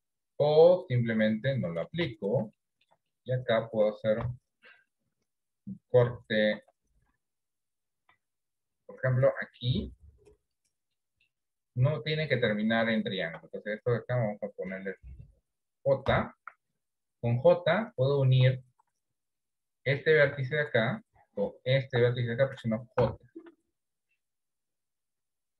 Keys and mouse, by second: 0.8 click, 1.5 middle click, 2.1 Tab, 2.6 shift+middle click, 3.1 middle click, 4.3 KP_7, 6.6 ctrl+r, 8.8 middle click, 10.5 click, 11.0 middle click, 18.7 ctrl+z, 18.7 j, 20.5 ctrl+z, 23.1 j, 24.2-25.5 shift+middle drag.